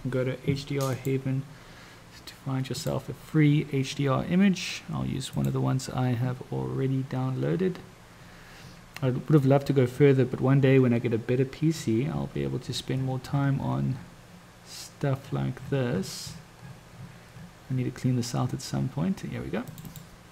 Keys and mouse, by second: 1.1 click, 2.8 click.